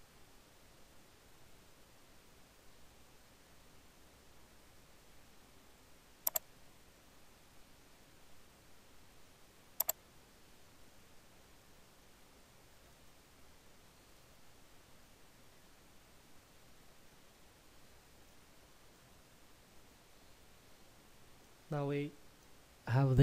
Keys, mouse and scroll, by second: 6.3 click, 9.8 click, 13.2 shift+middle click, 14.8-18.2 scroll up 1, 18.6 shift+middle click, 21.8 middle click.